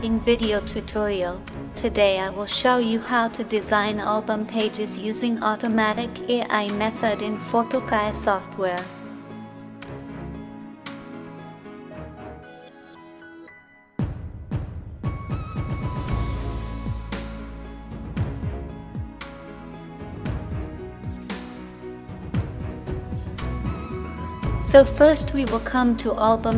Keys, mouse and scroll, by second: 4.0 space, 15.1 ctrl+-, 16.4 space, 17.0 space, 25.3-26.5 drag.